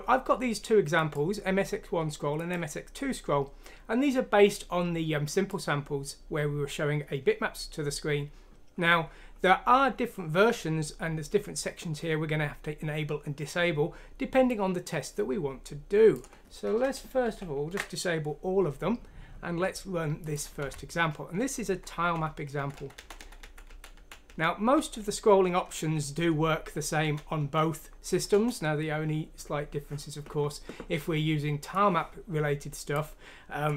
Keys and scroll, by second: 17.2 ctrl+q, 20.6 F6, 21.7 Down, 22.1 Up, 22.5 Down, 22.7 Down, 22.9 Down, 23.2 Down, 23.4 Down, 23.9 Down, 24.7 Up, 27.0 Down, 28.3 Return.